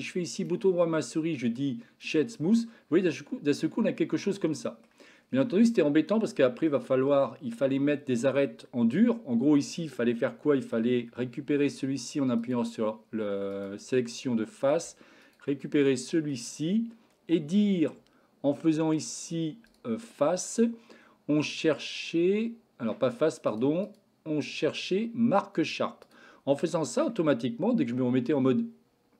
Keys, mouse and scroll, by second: 0.2-2.1 right drag, 2.6-4.9 middle drag, 6.0-6.7 middle drag, 9.0 Tab, 10.3 shift+middle click, 12.3 click, 13.4 click, 14.2 middle click, 15.2 shift+click, 15.6 middle click, 19.8-23.5 drag, 23.7-26.1 drag, 26.7 middle click, 27.7 Tab, 28.4-29.1 middle drag.